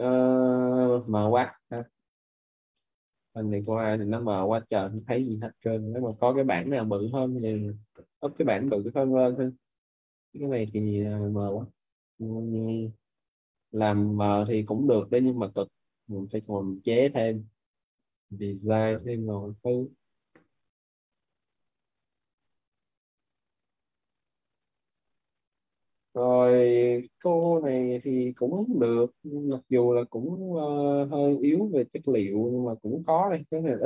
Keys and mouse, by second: 1.5 middle click, 11.2 middle click, 13.7 Delete, 16.3 click, 24.2 click, 27.2 middle click, 32.6 click.